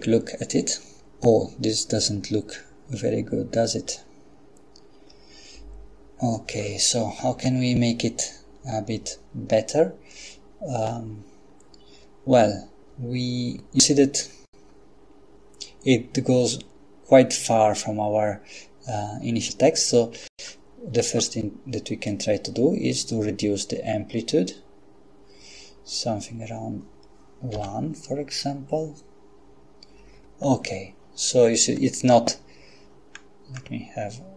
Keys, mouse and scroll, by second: 14.3-15.2 scroll up 1, 20.2 Escape, 22.1-26.5 drag, 27.5 F12, 33.1-34.1 scroll down 2.